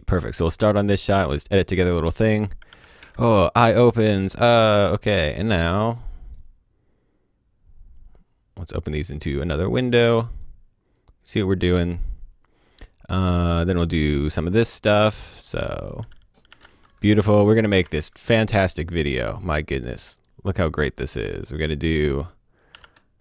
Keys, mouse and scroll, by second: 2.7 q, 2.9 space, 4.6 space, 5.1 click, 8.7 click, 12.6-13.6 scroll down 1, 13.6 click, 16.6 space, 17.7 o, 17.8 space, 18.0 click, 22.7 i, 22.8 space.